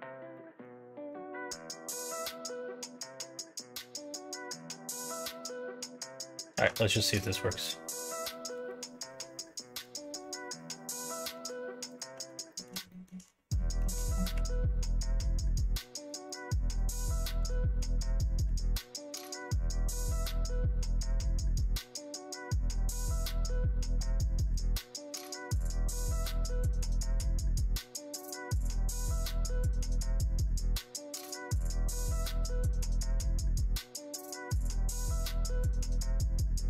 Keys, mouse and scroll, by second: 0.3 middle click, 1.0 middle click, 3.0 click, 4.0 middle click, 6.1 click, 6.5 ctrl+a, 7.0 click, 8.0 click, 8.6 ctrl+a, 9.7 click, 11.3 click, 11.9 click, 12.1 Tab, 12.5 middle click, 12.8 shift+middle click, 13.4 middle click, 14.3 1, 15.7 click, 16.2 shift+click, 16.6 shift+click, 17.4 shift+click, 18.4 m, 22.4 click, 22.9 shift+click, 23.5 shift+click, 24.4 m, 25.5 middle click, 26.4 click, 27.1 shift+click, 27.9 m, 29.8 middle click, 30.5 middle click, 31.2 shift+middle click, 32.4 shift+middle click, 33.7 click, 34.6 shift+click, 35.2 m, 36.3 click.